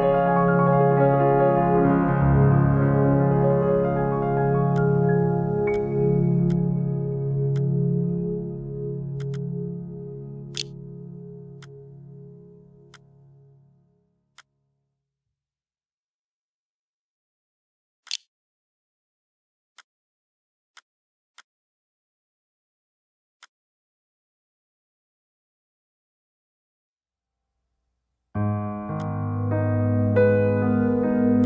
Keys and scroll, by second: 9.7-10.7 typing, 17.7 3.